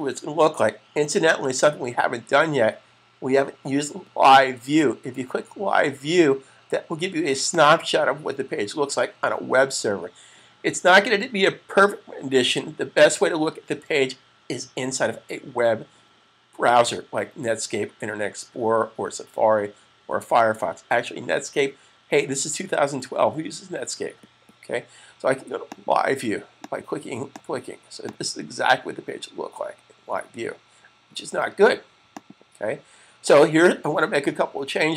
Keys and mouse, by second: 7.3 click, 25.6 click, 32.0 click.